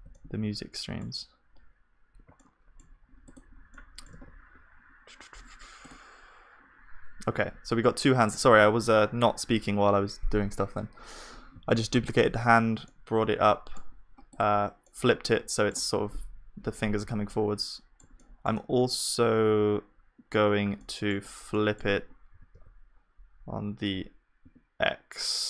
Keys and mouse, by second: 0.1 middle click, 0.1 right click, 0.6 middle click, 0.6 right click, 1.4-7.8 middle drag, 3.7-5.3 drag, 4.1 ctrl+s, 7.4 click, 7.8 KP_1, 12.9-14.9 middle drag, 14.9-17.3 drag, 17.3-21.6 middle drag, 22.4 s.